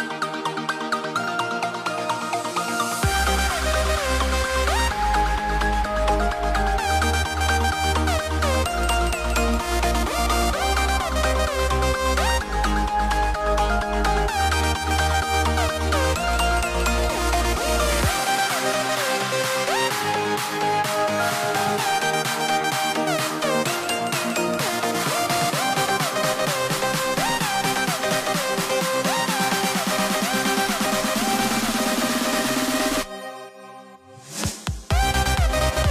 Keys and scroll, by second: 1.5 a, 3.8 super+z, 6.5 a, 7.6 v, 9.3 v, 13.6-17.4 typing, 18.9 a, 21.0 i, 21.5 b, 21.9 super+z, 22.1 v, 25.2 i, 26.5-29.1 typing, 31.2 a, 34.1 v.